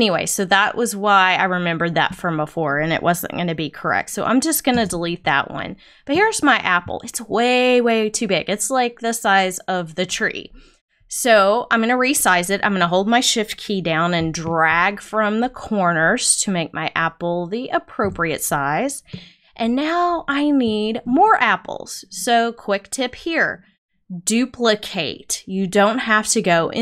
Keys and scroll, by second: 4.7 BackSpace.